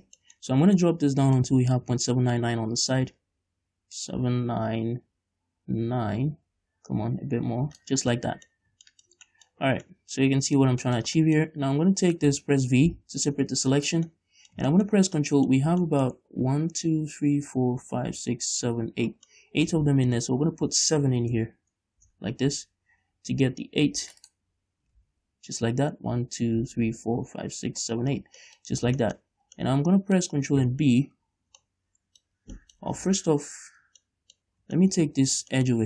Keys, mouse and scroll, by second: 2.0-8.3 drag, 8.3 scroll down 2, 8.4 middle click, 8.8-9.1 scroll up 2, 9.1-12.5 shift+middle drag, 12.5 right click, 13.2 v, 14.2 right click, 14.4-20.3 middle drag, 15.9 scroll up 2, 20.0-20.3 scroll down 2, 20.3 ctrl+r, 24.5 right click, 25.2 ctrl+z, 28.7 middle click, 28.9 scroll up 1, 29.3 shift+middle click, 30.0-33.0 middle drag, 33.3 ctrl+z, 34.3-35.8 middle drag, 34.8-35.1 scroll up 2, 35.5-35.8 scroll up 2.